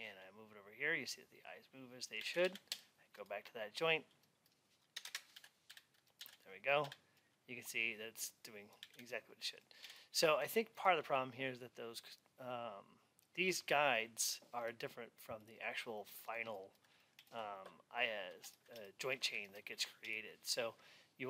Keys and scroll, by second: 2.3 alt+x, 5.2 alt+x.